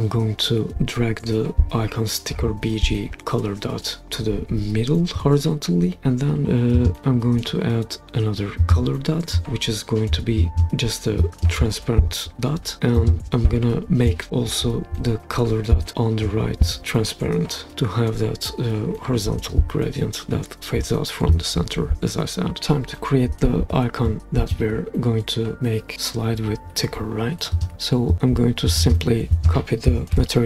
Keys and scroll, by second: 30.1 super+c.